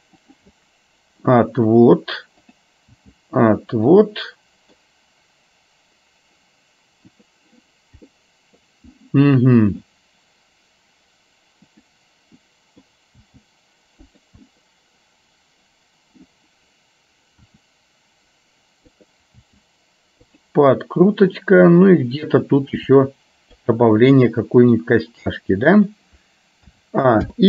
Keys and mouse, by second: 0.6 middle click, 2.6 click, 4.2 middle click, 7.2 click, 8.2 middle click, 9.7 click, 11.8 click, 12.6 middle click, 14.6-16.3 middle drag, 17.7 r, 19.6 g, 21.5 click, 22.7 r, 24.0 middle click.